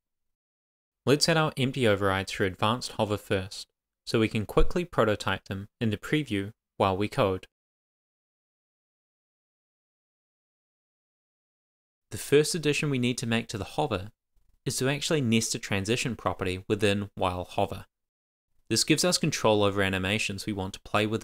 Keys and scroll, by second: 8.8 Return, 9.4 shift+;, 9.4 shift+[, 9.5 Return, 10.4 Down, 10.7 shift+super+Left, 10.9 shift+Up, 11.1 super+c, 11.1 Down, 11.5 super+v, 15.9 super+s.